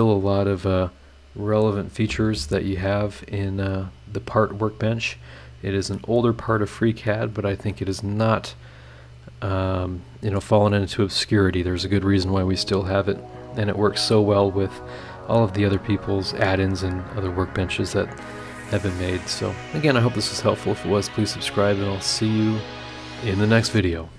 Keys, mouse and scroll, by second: 1.4 click, 5.4 scroll down 2, 5.9 middle click, 6.6 scroll up 2, 7.1 click, 8.5 click, 8.7-10.9 scroll up 2.